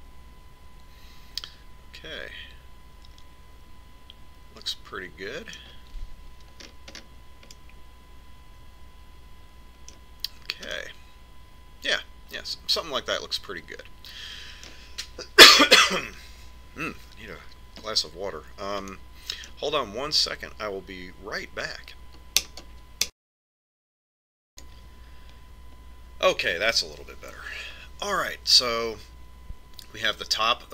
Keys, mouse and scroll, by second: 8.0-10.8 middle drag, 12.1-14.1 middle drag, 20.3-22.1 middle drag, 22.1 middle click, 30.4-30.7 middle drag.